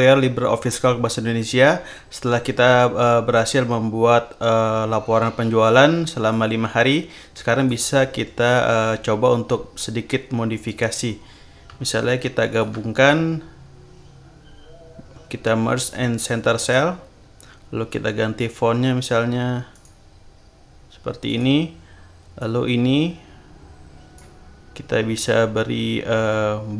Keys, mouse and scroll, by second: 6.3-7.8 drag, 10.6 click, 12.5 shift+click, 16.6 click, 18.3 click, 19.7 click, 21.2 click, 22.3-24.5 drag.